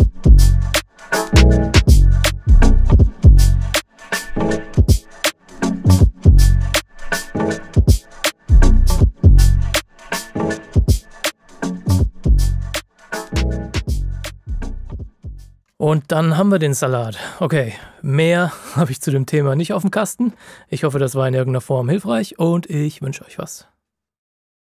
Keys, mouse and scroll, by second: 3.9 KP_Multiply.